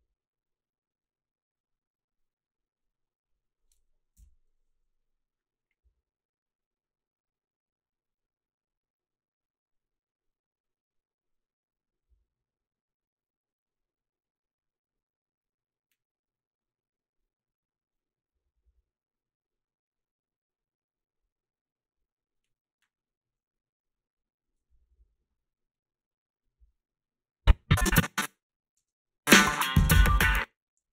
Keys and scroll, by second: 4.2 Home, 28.8 space, 30.2 space, 30.3 h.